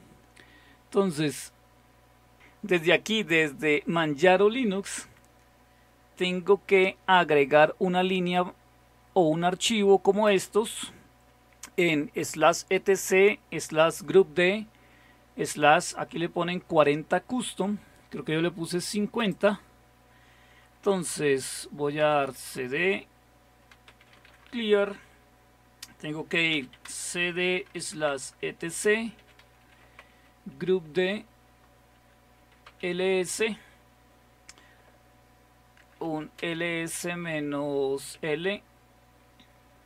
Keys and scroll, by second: 21.8-24.8 typing, 26.3-29.8 typing, 30.0 Tab, 31.3-33.7 typing, 35.8-38.8 typing, 38.6 Return.